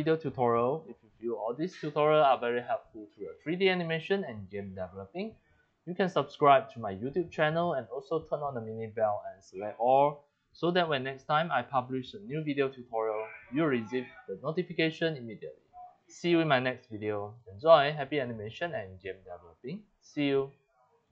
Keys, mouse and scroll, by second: 5.8-6.1 drag, 6.4 click, 8.3-8.7 drag, 17.0 middle click, 18.1 middle click, 21.0 click.